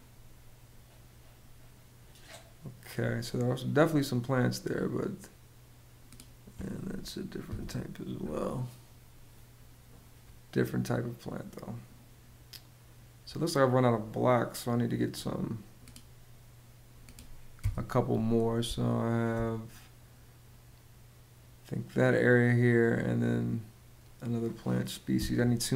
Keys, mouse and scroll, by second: 7.1 BackSpace, 17.2 BackSpace, 18.4 space.